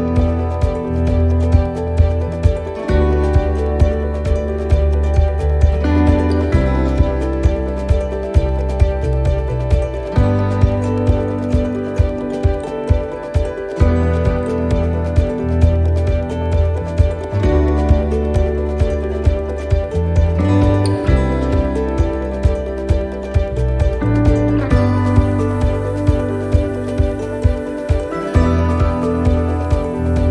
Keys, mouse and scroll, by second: 0.0 shift+middle click, 0.5-0.9 scroll up 1, 2.0 scroll down 1, 2.4 shift+middle click, 4.1 click, 5.7-6.1 scroll up 2, 6.3 middle click, 7.5 right click, 8.1 shift+right click, 8.8 right click, 9.3 shift+right click, 11.1 c, 19.1 shift+middle click, 19.5 shift+scroll down 1, 20.0 scroll down 1, 20.3 middle click, 21.1-21.6 scroll down 1, 23.2 e, 29.1 middle click, 29.1-29.9 scroll up 3.